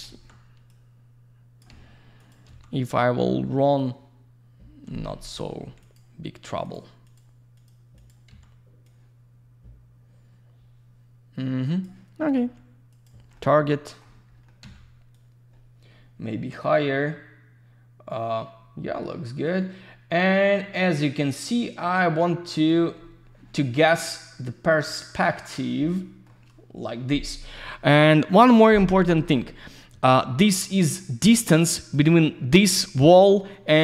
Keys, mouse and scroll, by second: 0.6 typing, 0.7 click, 2.2 click, 3.7 click, 5.0 Escape, 5.8 click, 6.6 click, 7.0 click, 7.5 click, 7.6 double click, 7.9 click, 8.8 click, 12.3 q, 12.9 click, 13.3 alt+middle click, 14.5 middle click, 15.1 click, 23.9 shift+middle click, 25.1 shift+middle click, 31.5 click, 31.9 click, 32.0 double click.